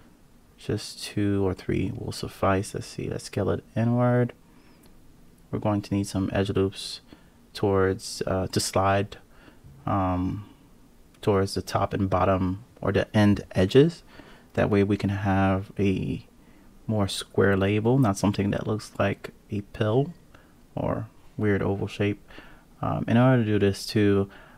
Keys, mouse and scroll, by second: 0.7 KP_7, 1.9 a, 2.7 s, 6.6 click, 8.3 g, 10.0 KP_3, 11.5 g, 13.7 click, 14.5 click, 17.3 click, 18.2 click, 18.8 click, 19.3 click, 20.3 KP_7, 21.0-21.5 scroll up 2, 22.4 alt+z, 23.3 1, 23.8 click.